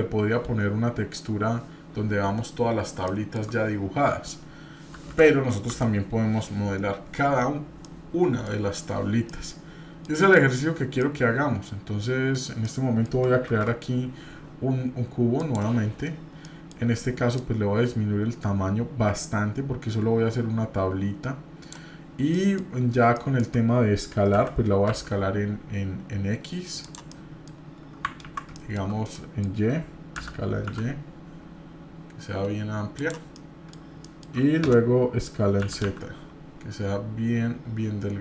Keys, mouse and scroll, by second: 2.5-3.0 scroll up 3, 3.0 shift+middle click, 4.5 scroll down 2, 5.7 Delete, 7.8 shift+middle click, 9.3-10.1 middle drag, 10.6 scroll up 1, 11.0-12.4 middle drag, 12.6-13.1 middle drag, 13.4 shift+a, 16.0-16.4 scroll down 2, 16.4-16.7 middle drag, 17.4-21.8 drag, 22.3 middle drag, 22.7-23.1 scroll up 1, 23.1-23.5 shift+middle drag, 23.6 scroll up 1, 24.3 s, 27.1-27.5 middle drag, 27.6-28.1 scroll up 2, 28.3 ctrl+z, 28.5-28.9 shift+middle drag, 28.9 scroll up 1, 29.1-29.6 middle drag, 30.2 s, 33.3 middle click, 33.8 scroll down 1, 34.0 shift+middle click, 35.6 s.